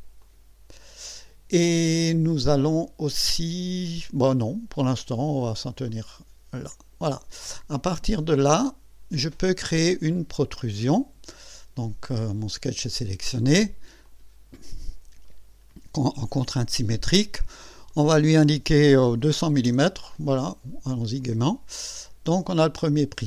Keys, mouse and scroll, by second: 0.2 click, 5.9-7.2 drag, 7.9 click, 12.3 click, 14.1 click, 16.5 click, 17.9 click, 19.2 KP_2, 19.4 KP_0, 21.2 click, 21.7-22.5 scroll down 2, 22.8 scroll up 1.